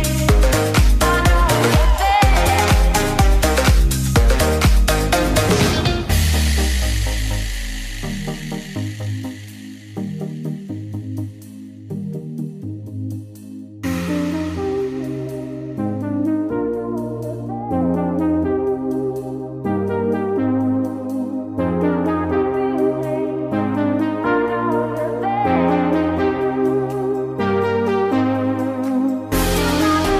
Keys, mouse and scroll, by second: 1.3 Tab, 2.6 click, 4.6-6.8 drag, 8.0 click, 13.0-14.3 drag, 15.3 click, 17.3 click, 19.3-22.4 drag, 23.4-28.6 drag.